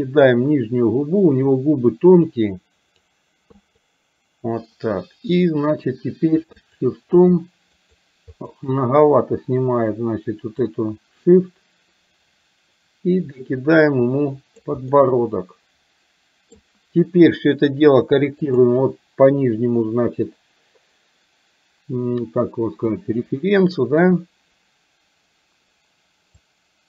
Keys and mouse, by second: 1.2-3.1 drag, 3.6 click, 6.7 shift+click, 7.2 shift+click, 7.9 shift+click, 8.4 shift+click, 10.7-14.6 drag, 15.0-16.6 middle drag, 18.6 click, 23.0-24.1 drag, 26.5 click.